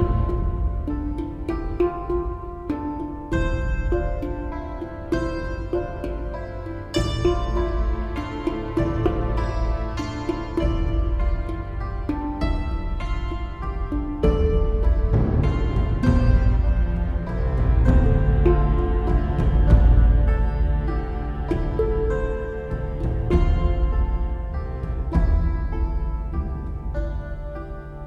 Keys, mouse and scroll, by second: 3.6 right click, 4.6 right click, 4.9 right click, 7.3 right click, 8.4 right click, 8.7 right click, 9.6 right click, 9.8 right click, 10.1 right click, 10.3 right click, 11.4 right click, 11.6 right click, 12.4 right click, 13.0 right click, 16.1 right click, 16.2 right click, 16.4 right click, 16.7 right click, 17.8 right click, 18.1 right click, 18.6 right click, 18.9 right click, 24.9 right click.